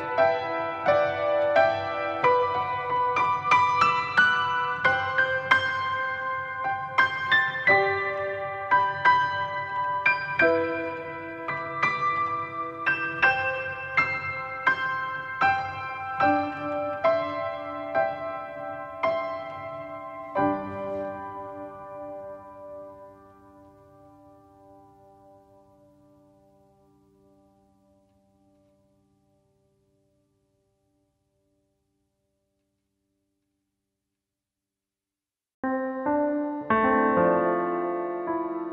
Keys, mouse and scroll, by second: 0.3 click, 0.4 KP_0, 0.7 scroll up 2, 1.2 scroll down 1, 1.5 click, 5.7 click, 6.3 alt+a, 7.3 click, 8.1 click, 8.2 click, 8.4 click, 11.6 alt+a, 12.1 scroll up 1, 13.5 Right, 13.6 KP_0, 14.0 ctrl+s, 14.2 click, 15.0-17.1 drag, 17.8 scroll up 1, 19.4 click, 22.7-23.6 scroll down 2, 23.1 KP_7, 24.1 click, 26.5 s, 26.9 click, 27.9-30.0 typing, 28.5 click, 28.9 click, 29.3 click, 30.3 click, 32.9-35.9 drag, 35.5 KP_0, 35.7 scroll down 1, 36.5 click, 36.9 scroll down 1.